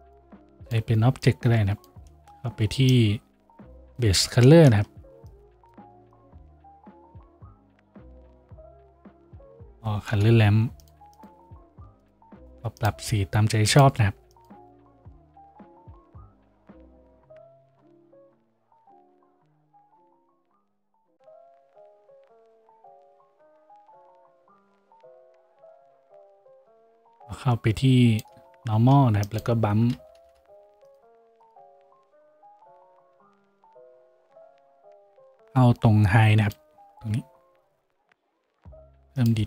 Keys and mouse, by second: 9.1 shift+a, 28.8 shift+a, 30.3 m.